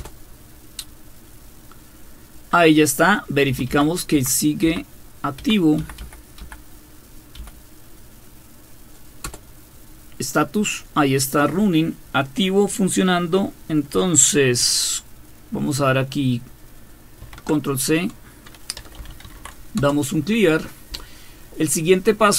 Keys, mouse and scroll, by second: 0.0 Return, 3.5 Up, 3.7 Up, 4.1 Up, 4.6 Up, 5.4 Up, 5.8 Up, 6.0 Up, 6.4 Up, 7.4 Up, 9.2 Return, 17.2 ctrl+c, 18.5-19.8 typing.